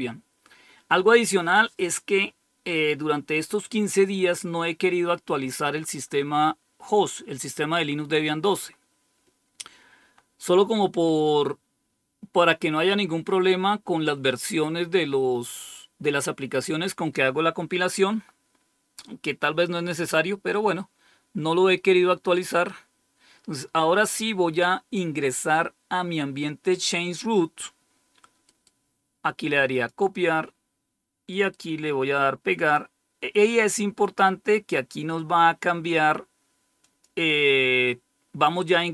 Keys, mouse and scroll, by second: 19.8-22.3 drag, 29.6 click, 31.3 right click, 32.5 click, 36.7 click.